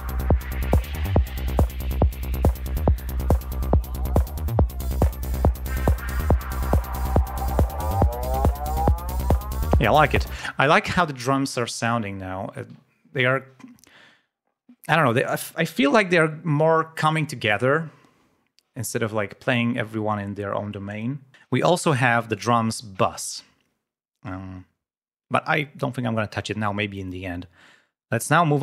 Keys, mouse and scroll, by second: 7.0 ctrl+scroll down 2, 7.6 ctrl+scroll up 2, 10.4 space, 12.4-13.1 scroll down 4, 13.6-13.9 ctrl+scroll up 3, 21.3-21.8 scroll up 4, 22.2 click, 26.1-26.5 scroll down 2, 27.0 scroll up 2.